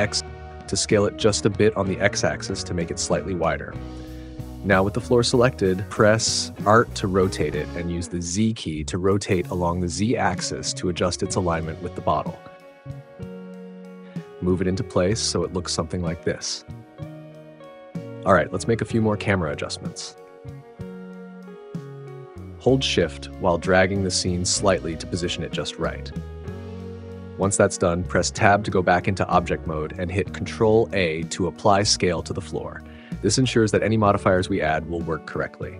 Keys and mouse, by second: 2.6 click, 4.6 r, 6.3 z, 9.3 click, 10.6 click, 14.1 g, 18.0 click, 22.6 shift+click, 28.6 Tab, 30.0 click, 30.5 ctrl+a.